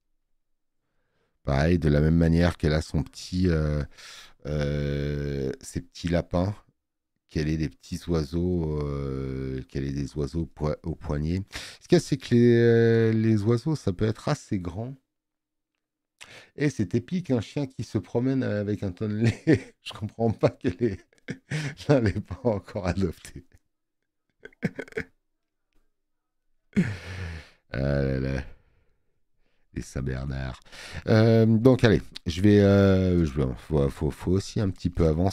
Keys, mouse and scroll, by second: 26.9 click, 31.1 click.